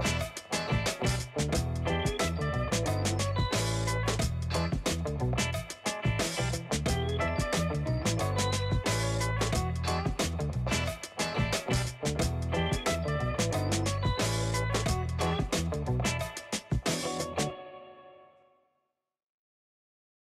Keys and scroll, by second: 0.8 space, 6.1 space, 9.9 space, 16.2 space.